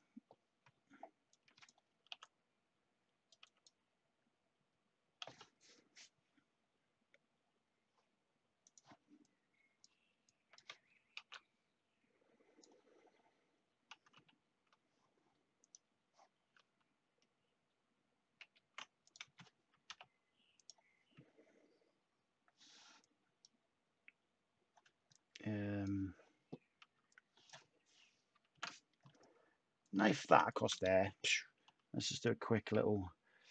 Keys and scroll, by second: 2.0 t, 11.1 a, 14.1 x, 18.3 ctrl+z, 19.8 /, 24.9 /, 26.7 /, 28.4 k, 31.6 /.